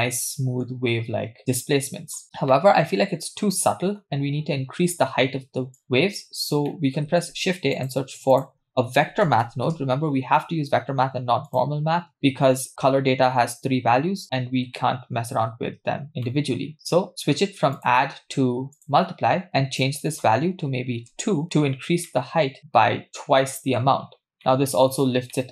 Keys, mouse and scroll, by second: 0.8-1.4 scroll up 2, 1.4-2.2 middle drag, 1.4-2.2 scroll down 1, 2.2 scroll down 1, 2.5-4.1 middle drag, 5.8 click, 6.7 middle click, 7.1 shift+a, 14.2 click, 14.8 middle click, 15.4-15.8 scroll up 2, 16.1 scroll down 3, 16.3 middle click, 17.1-17.6 scroll up 2, 17.8-18.9 drag, 19.5-21.3 shift+drag, 22.1-23.8 middle drag, 24.2-24.9 scroll down 2, 24.4-24.9 middle drag, 25.3-25.5 middle drag.